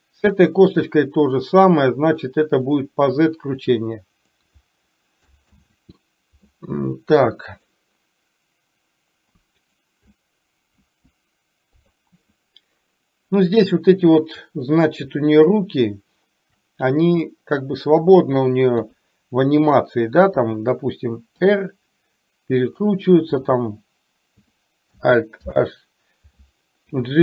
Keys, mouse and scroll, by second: 1.7 click, 2.7 click, 3.7 click, 5.6 ctrl+z, 7.6 click, 10.9 KP_1, 11.9 click, 17.2-18.2 middle drag, 18.9 KP_3, 21.5 r, 25.5 alt+h, 27.0 g.